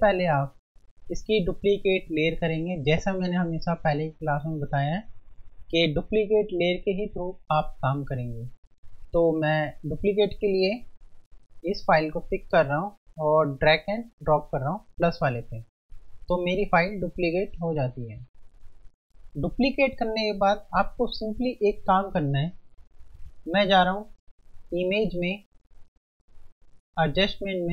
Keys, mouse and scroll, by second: 10.6 F1, 11.7 click, 15.6 F1, 23.8 F1, 24.8 click.